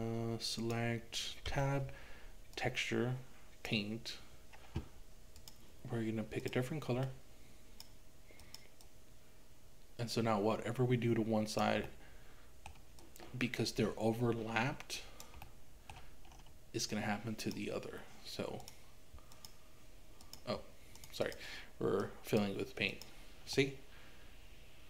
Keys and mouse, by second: 0.6 click, 1.5 Tab, 5.4 click, 8.9-11.7 drag, 11.9 middle click, 13.0-15.3 drag, 15.4 middle click, 17.0 click, 18.6 click, 19.4 click, 20.2 click, 21.0 click, 21.3 click, 23.6-24.8 middle drag.